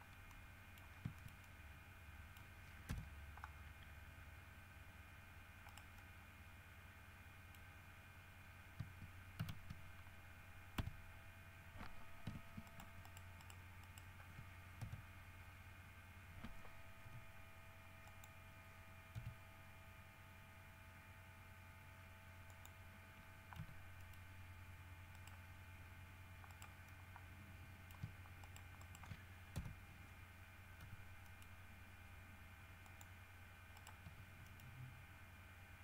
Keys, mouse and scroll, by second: 0.5 middle click, 1.1 scroll down 3, 1.4-2.8 shift+middle drag, 3.1 KP_3, 3.7 scroll up 2, 5.9 right click, 6.2-8.0 middle drag, 6.8 right click, 9.6 shift+s, 11.0 2, 12.9 shift+right click, 14.0 shift+right click, 15.0 shift+KP_3, 18.3 click, 19.4 r, 22.7 click, 23.8 g, 24.2 middle click, 25.4 right click, 26.7 right click, 27.1-28.3 middle drag, 28.6 shift+middle click, 29.8 shift+KP_3, 31.0 g, 31.4 middle click, 33.0 middle click, 34.0 right click, 34.2 g, 34.6 middle click.